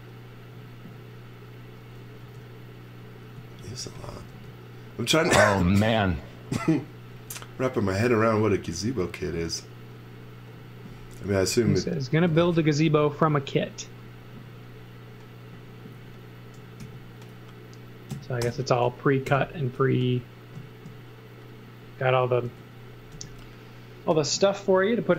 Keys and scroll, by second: 2.2-5.1 typing, 7.1 space, 8.1 space, 12.7 space, 16.8 super+x, 18.4 alt+shift+v, 19.2 m, 22.4 space, 23.1 m.